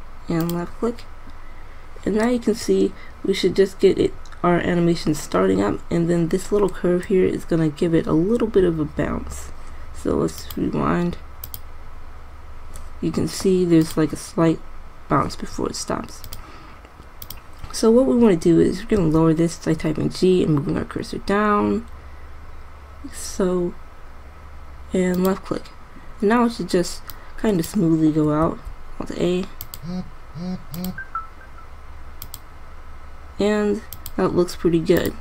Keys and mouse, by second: 2.6 middle click, 7.1-8.4 middle drag, 10.8-13.0 drag, 16.6-17.8 drag, 19.3 g, 25.5-26.8 drag, 27.4-28.8 drag, 28.8 alt+a.